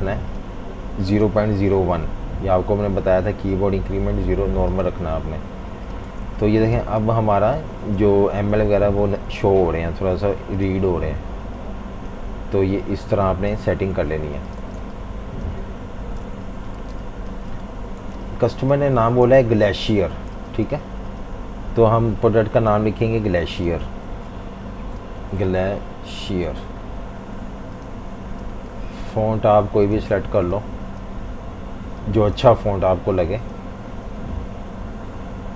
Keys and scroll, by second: 0.9-2.2 typing, 6.1-7.1 typing, 8.1 Page_Down, 8.3 Down, 8.5 Down, 8.6 Down, 8.8 Down, 9.0 Down, 9.3 Down, 13.6 super+-, 13.8 super+-, 13.9 super+-, 14.6-16.9 typing, 16.2 super+-, 18.0-20.3 typing, 24.7-26.9 typing.